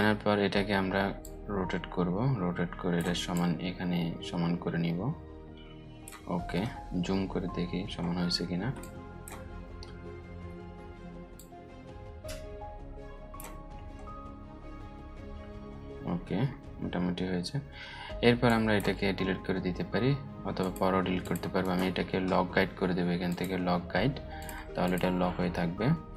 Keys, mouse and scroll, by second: 6.2 alt+scroll up 1, 8.3-9.0 space, 10.9-13.1 drag, 11.8 click, 12.2-13.3 drag, 13.6 alt+scroll up 1, 15.8 alt+scroll down 1, 18.0 click, 21.1 right click, 22.8 click.